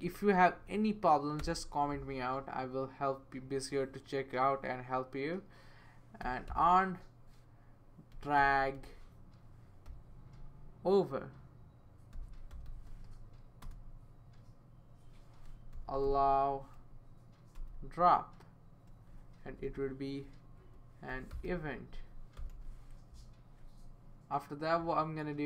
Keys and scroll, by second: 0.5 Right, 1.4 space, 6.0-10.3 typing, 11.9-13.4 typing, 13.6 Return, 15.2-16.5 typing, 17.5 Return, 19.4 typing, 20.6 Left, 20.8-22.9 typing.